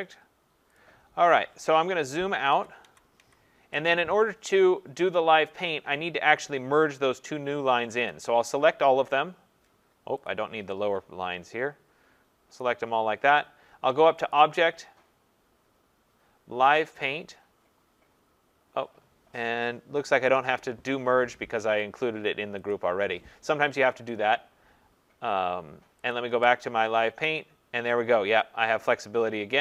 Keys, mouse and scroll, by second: 2.5 ctrl+-, 2.9 ctrl+-, 3.2 ctrl+-, 8.1 click, 9.2 click, 10.2 click, 12.6 click, 14.3 click, 21.6 Escape, 22.7 click, 26.1 click.